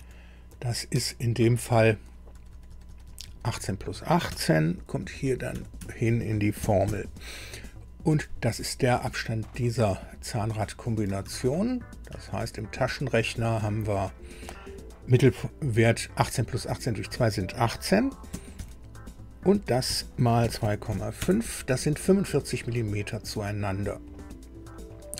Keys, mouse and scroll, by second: 0.9 Escape, 2.3 Left, 2.5 Left, 2.7 Left, 2.9 Left, 3.1 Left, 3.3 Left, 4.3 BackSpace, 5.5 Delete, 5.8 Delete, 6.6 KP_1, 6.9 KP_8, 11.3 alt+Tab, 18.3 KP_1, 18.6 KP_8, 20.4 KP_2, 20.9 KP_5, 21.2 KP_Enter.